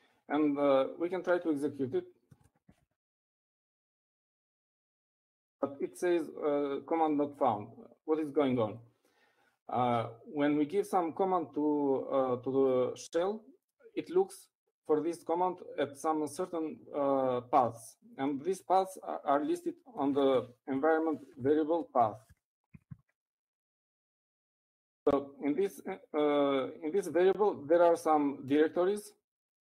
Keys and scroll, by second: 3.4-5.9 typing, 24.3 typing.